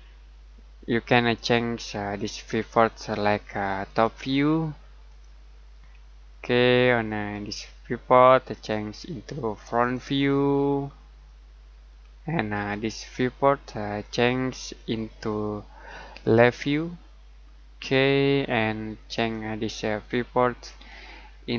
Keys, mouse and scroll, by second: 2.1 click, 5.8-6.2 scroll down 1, 6.3 middle click, 10.8-11.2 scroll down 1, 11.2 middle click, 17.4-17.9 scroll down 1, 17.9 middle click, 19.1 click.